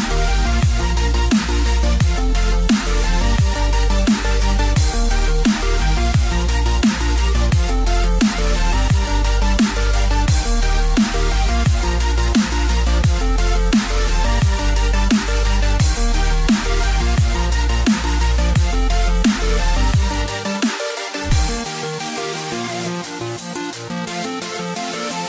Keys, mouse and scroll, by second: 5.3 middle click, 6.7 ctrl+r, 12.1 click, 12.7 click, 14.3 click, 14.4 click, 15.0 middle click, 16.5 right click, 18.4 click, 18.9 middle click, 21.1 ctrl+z, 21.6 ctrl+z, 22.2 ctrl+z, 23.0 ctrl+z, 23.6 ctrl+z, 24.5 ctrl+z.